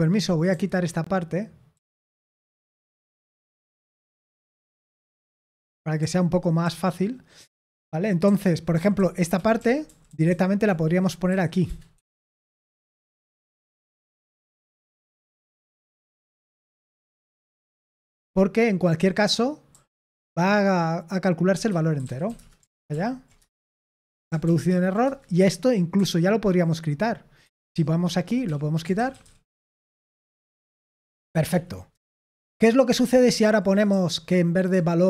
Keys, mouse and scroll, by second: 1.6-5.1 typing, 6.5 typing, 8.4-12.5 typing, 15.1 typing, 18.9 k, 21.6-22.7 typing, 22.8 ctrl+p, 23.3 Return, 24.4 ctrl+p, 24.6 ctrl+p, 24.9 Return, 25.9 typing, 27.3-29.3 typing, 29.4 Return, 29.7 ctrl+p, 29.9 ctrl+p, 30.2 Return, 31.2 ctrl+p, 31.4 ctrl+p, 31.8 Return, 33.4-33.8 typing.